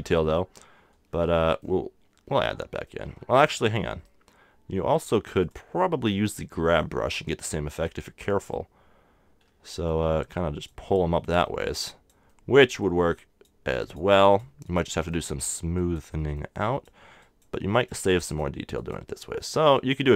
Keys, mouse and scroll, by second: 0.4-2.6 middle drag, 3.1 super+z, 3.4 super+z, 3.7 super+z, 5.4-7.3 super+drag, 5.4 super+right click, 7.1 right click, 7.3-10.3 middle drag, 10.3-20.1 drag, 16.2-20.1 middle drag.